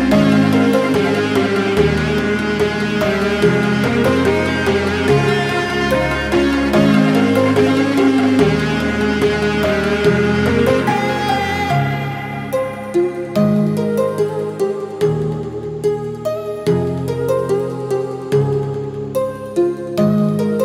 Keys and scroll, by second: 19.0 ctrl+z.